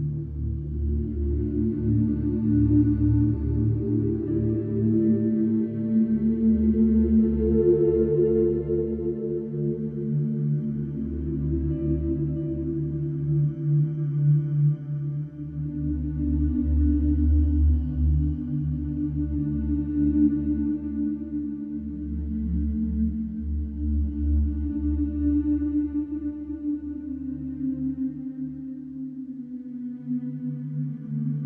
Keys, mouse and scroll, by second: 0.6 click, 1.5 middle click, 9.0 click, 11.9 click, 13.0 e, 14.8 click, 17.4 click, 20.4 KP_6, 21.6 click, 23.7 F3, 25.7 click, 27.5 click, 28.7 e, 30.9 click.